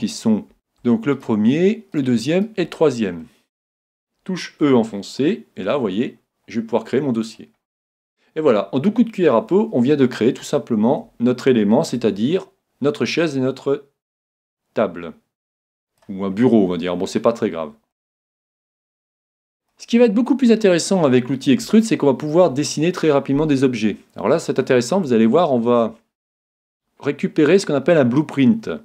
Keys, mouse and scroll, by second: 1.2-4.1 right drag, 2.9-4.9 middle drag, 4.6 e, 7.3-9.1 drag, 7.7-10.5 middle drag, 9.6 space, 12.0 Tab, 12.4-14.5 middle drag, 14.5-16.2 drag, 16.4-18.2 middle drag, 18.3-23.6 middle drag, 27.6-28.8 middle drag.